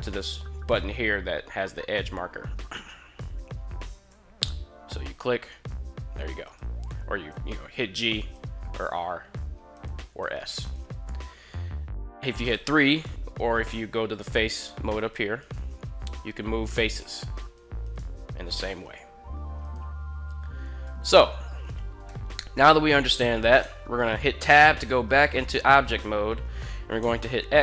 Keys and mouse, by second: 3.8 g, 6.2 right click, 7.0 g, 8.0 right click, 9.6 right click, 9.6 r, 9.9 s, 10.5 right click, 12.3 3, 15.2 right click, 16.1 g, 17.2 right click, 17.5 right click, 18.1 r, 18.7 right click, 19.4 right click, 20.5 a, 20.8 a, 21.9 KP_1, 23.3 Tab, 26.6 x.